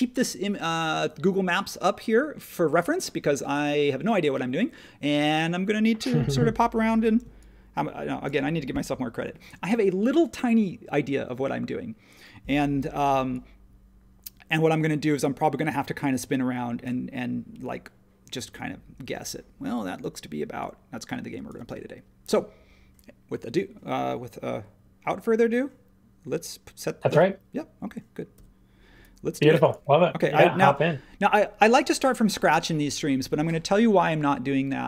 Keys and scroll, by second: 30.6 space.